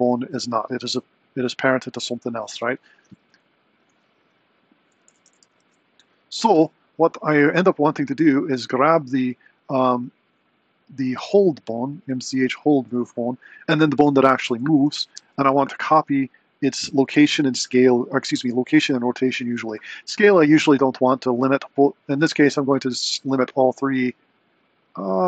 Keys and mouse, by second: 3.3 Left, 4.4 click, 4.9 a, 5.2 alt+g, 5.4 alt+r, 5.6 alt+s, 7.1 click, 11.0 click, 13.6 shift+click, 15.3 ctrl+shift+c.